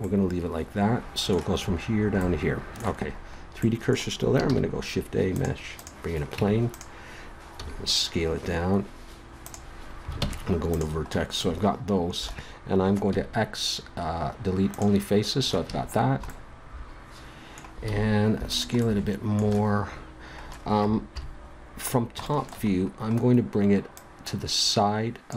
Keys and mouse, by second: 2.2-3.7 middle drag, 4.4 shift+a, 6.3 Tab, 7.5 s, 10.2 ctrl+Tab, 13.1 x, 15.6 a, 17.9 s, 21.1 KP_7, 23.9-25.2 drag.